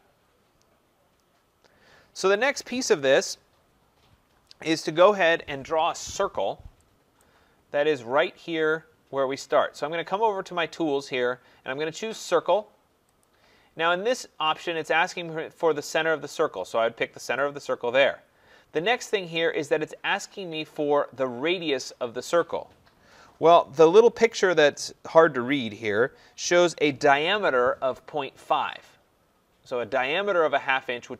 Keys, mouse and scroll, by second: 2.3 right click, 5.9 middle click, 6.2 middle click, 6.3 middle click, 7.2 right click, 7.6 middle click, 13.2 click, 17.4 click.